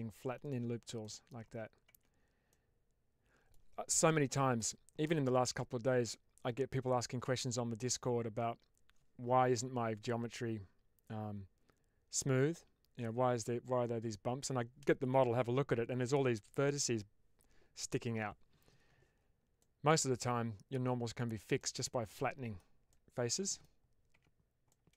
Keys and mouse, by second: 0.3 click, 1.0 middle click, 1.8 Tab, 2.4-3.4 middle drag, 19.5-20.6 middle drag, 21.5-22.5 middle drag, 22.8-23.5 middle drag, 24.0 Tab, 24.7 middle click.